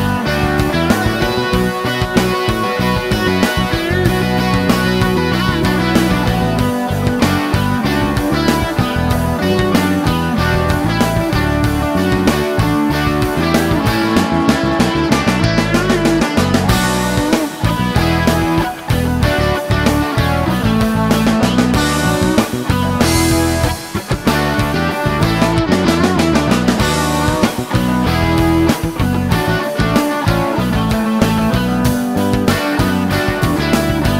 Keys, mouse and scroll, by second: 0.4-0.9 scroll up 2, 1.0 scroll up 2, 1.1 scroll down 2, 1.2-2.8 scroll up 6, 3.0-3.8 scroll down 4, 3.9 middle click, 4.5 scroll up 2, 5.0-6.2 middle drag, 7.2 click, 8.2 click, 8.7 space, 9.8 click, 10.6 click, 11.3 middle click, 16.2 click, 18.3 click, 19.7 click, 21.1 click, 24.8 click, 26.8 click, 27.3 middle click, 30.7 click, 31.7 click, 33.2 shift+o.